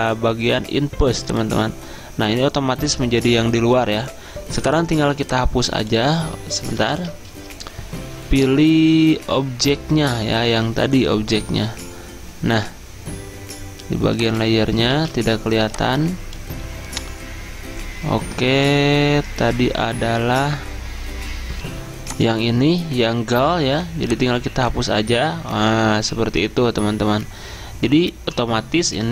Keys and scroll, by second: 7.0 ctrl+z, 15.0 ctrl+z, 21.7 F10, 21.8 F10.